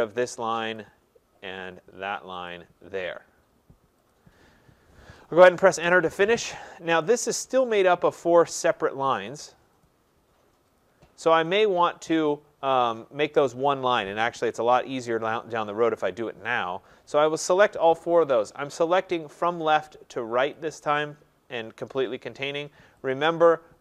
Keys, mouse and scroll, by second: 0.8 click, 2.5 click, 4.1 click, 5.9 Return, 7.8 click, 8.8 click, 9.8 click, 10.8 click, 11.5 click, 12.8 click, 17.1 click, 18.5 click, 20.6 click, 23.1 click.